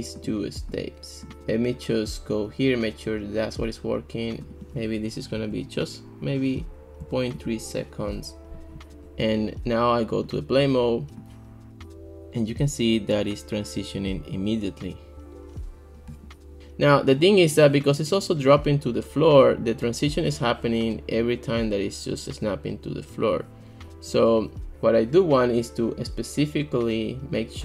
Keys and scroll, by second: 5.4 ., 7.0 3, 7.4 Return.